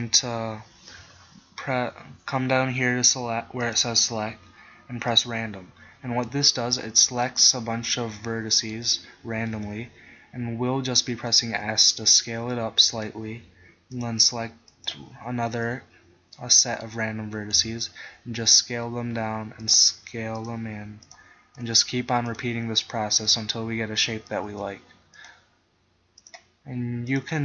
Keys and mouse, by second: 8.0-9.7 middle drag, 9.7 KP_1, 11.6 s, 15.8 middle click, 17.6 KP_1, 18.5 s, 19.8 click, 21.6 s, 24.6 s.